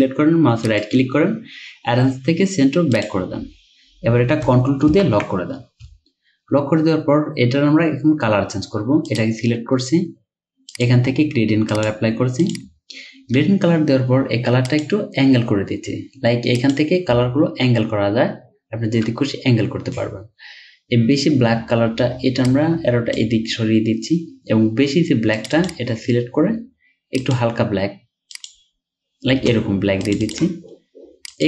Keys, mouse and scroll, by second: 0.7 right click, 5.0 ctrl+2, 6.2-6.6 alt+scroll up 1, 7.2-9.9 scroll up 1, 17.2 Down, 25.6 double click, 30.3 double click.